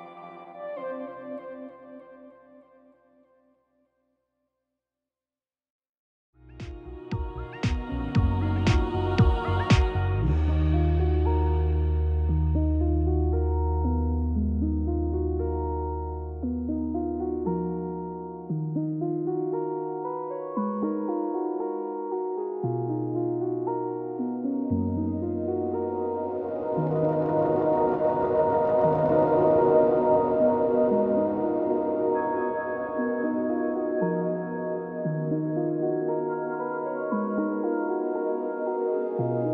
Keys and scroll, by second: 0.9 ctrl+j, 3.3 ctrl+t.